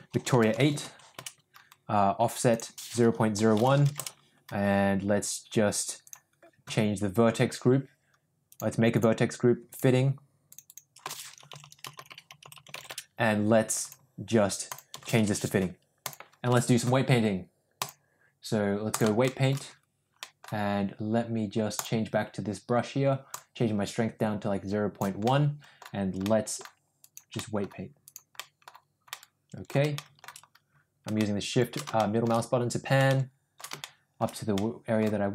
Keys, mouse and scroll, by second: 2.4-4.3 drag, 5.9-8.5 drag, 8.9 click, 9.6 click, 10.5 click, 10.6-13.2 drag, 11.5 t, 11.9 BackSpace, 12.5 t, 13.7 click, 14.6-16.1 drag, 17.8-19.0 drag, 19.2 shift+middle drag, 20.1 middle drag, 21.6 click, 23.3-25.0 drag, 25.2 middle click, 26.2 middle click, 26.9 click, 27.3 middle click, 28.0 click, 28.3 middle click, 29.0 middle click, 29.9 shift+middle click, 31.1 shift+middle click, 31.9 shift+middle click, 33.0 shift+middle click, 33.7 shift+middle click, 34.5 middle click.